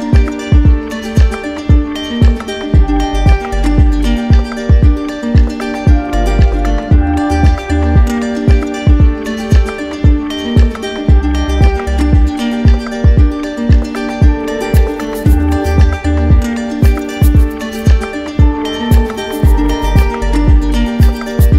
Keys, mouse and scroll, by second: 0.8-1.9 right drag, 9.7 right click, 11.6 right click, 12.5 right click, 13.0 alt+right click, 13.6 alt+right click, 14.9 right click, 16.1 click, 17.0 click, 18.1 click, 18.8 right click, 19.5 alt+right click.